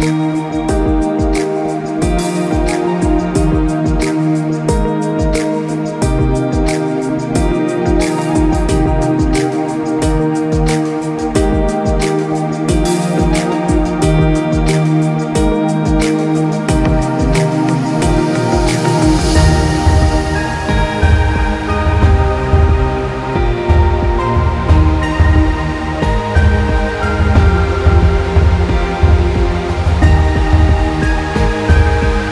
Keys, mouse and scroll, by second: 0.6-1.0 scroll down 1, 1.0 click, 2.5 click, 4.9 click, 7.4 click, 8.5 Up, 8.8 Right, 9.6 click, 10.7 right click, 13.3 click, 13.7 Up, 13.9 Right, 14.1 Up, 14.6 click, 16.4 space, 16.6 click, 16.8 space, 17.9-18.4 alt+scroll down 1, 18.5 space, 18.6 click, 18.8 space, 20.1 space, 20.2 click, 20.4 space, 23.8 click, 26.2 click, 26.8 alt+scroll down 1, 27.1 space, 27.4 click, 28.4 click.